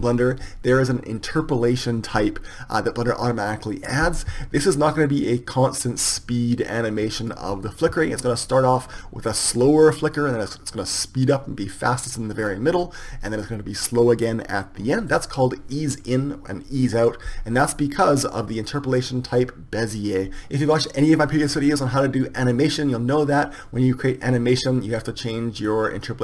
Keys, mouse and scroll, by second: 6.1-7.3 drag, 9.3-11.4 drag, 25.7 click.